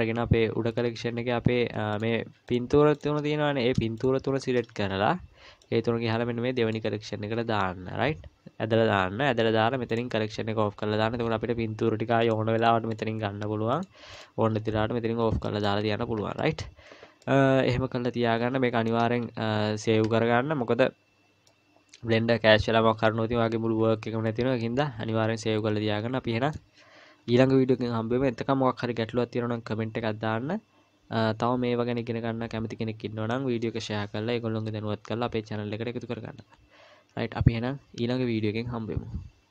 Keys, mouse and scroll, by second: 0.6-1.9 scroll down 2, 1.9 click, 2.5 click, 4.0 shift+click, 4.9-5.6 scroll down 3, 5.6 click, 7.3-8.0 scroll down 2, 9.9 click, 11.2-12.2 scroll down 2, 12.2 click, 12.2-12.6 scroll down 4, 12.6 click, 12.9 click, 15.4 middle click, 15.8-16.3 scroll up 3, 16.4 middle click, 16.4-17.0 scroll up 2, 17.0 scroll up 1, 17.2 middle click, 21.5 middle click, 23.8-24.3 scroll down 2, 24.3 middle click.